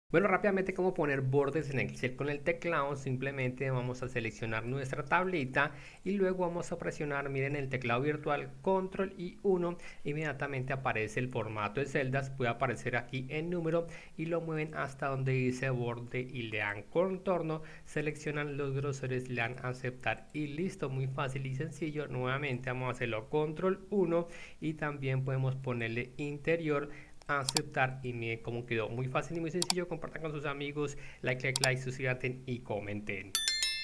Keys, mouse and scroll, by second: 4.2 click, 5.2 click, 9.3 ctrl+1, 12.0 click, 14.6 click, 16.5 click, 18.2 click, 19.5 click, 20.2 click, 21.8-22.6 drag, 23.6 ctrl+1, 25.7 click, 27.3 click, 27.9 click, 33.7 click.